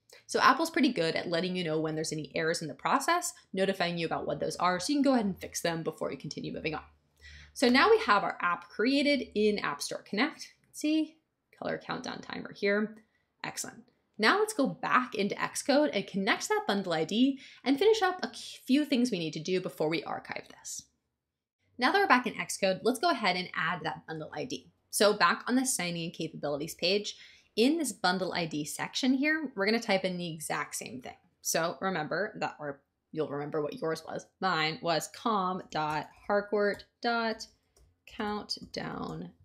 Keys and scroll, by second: 35.3-39.4 typing.